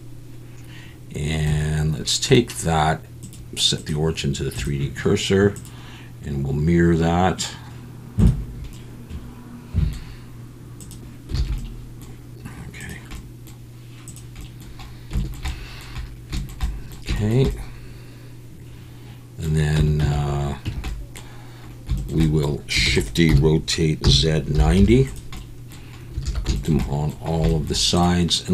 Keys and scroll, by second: 11.4 alt+a, 19.8 Tab, 20.0 a, 20.6 Tab, 22.9-24.7 typing, 26.2 alt+a.